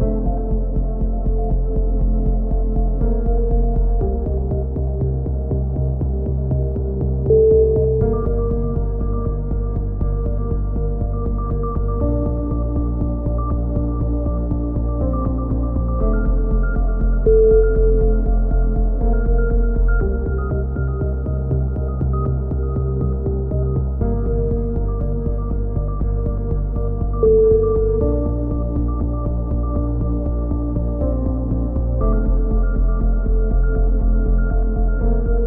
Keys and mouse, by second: 1.3 z, 2.3 right click, 2.8 right click, 3.1 e, 3.6 click, 5.0 click, 8.7 click, 8.7 right click, 9.0 click, 15.5 right click, 16.3 right click, 16.6-19.3 drag, 17.1 right click, 18.6 right click, 20.7-21.7 drag, 21.7 KP_7, 22.1-24.1 drag, 24.1 right click, 24.9 click, 26.1 click, 26.6 c, 26.9 right click, 27.3 click, 27.9 right click, 27.9 c, 28.2 click, 29.6 c, 29.8 right click, 30.0-31.3 drag, 31.3 click, 31.4 a, 31.6 z, 32.1 KP_3, 32.8 KP_1, 33.3 right click, 33.5-35.3 drag, 34.5 a, 34.8 z.